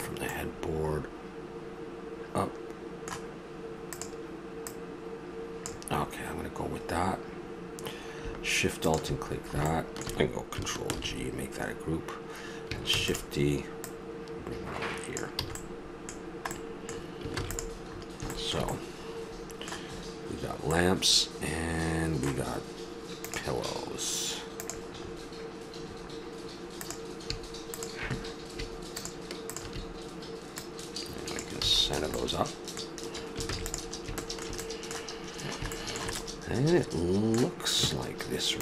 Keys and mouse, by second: 0.0-1.2 middle drag, 2.2-3.9 middle drag, 3.9-6.0 drag, 6.0-6.6 middle drag, 9.3-10.6 middle drag, 10.9 ctrl+g, 12.9 shift+d, 13.9-14.5 drag, 15.4 a, 15.9 middle click, 17.3 ctrl+s, 18.3 middle click, 21.1 middle click, 21.3-21.7 middle drag, 25.0 middle click, 26.8-31.4 right drag, 31.7 a, 32.1-33.5 middle drag, 33.5 ctrl+s.